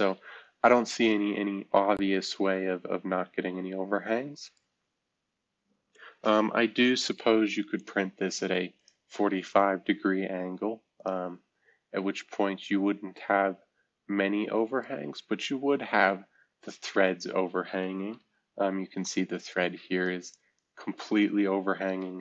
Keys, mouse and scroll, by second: 7.8 click, 8.8 click, 11.0-12.5 drag, 12.5-13.1 scroll up 1, 13.1-14.8 drag, 14.8-15.8 right drag, 15.8-17.3 scroll up 1, 18.5 F2, 19.0 click, 21.7 shift+F2.